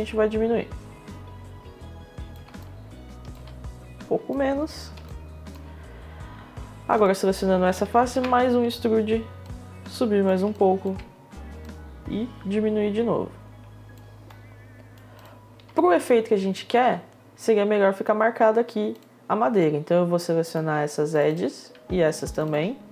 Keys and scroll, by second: 8.0 e, 10.4 e.